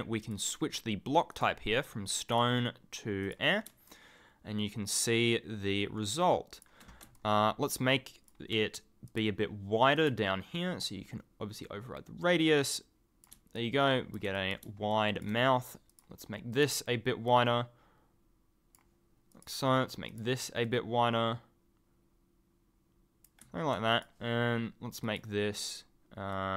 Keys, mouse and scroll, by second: 0.2 click, 1.3 click, 2.0 click, 3.2 click, 3.8 ctrl+click, 7.1 ctrl+click, 7.2 ctrl+scroll up 1, 8.1 ctrl+scroll down 1, 9.0 click, 9.9 click, 13.5 ctrl+click, 14.9 ctrl+click, 15.0 ctrl+scroll up 1, 15.1-15.9 ctrl+scroll, 17.2 click, 19.3 click, 20.1 click, 23.9 click, 25.0 click, 26.3 click.